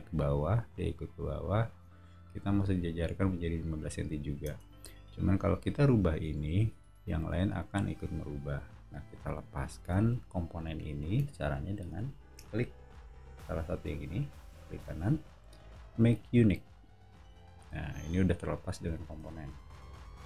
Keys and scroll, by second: 2.0 o, 4.4 space, 6.4 l, 9.4 Escape, 9.7 space, 10.1 Escape, 19.1 o.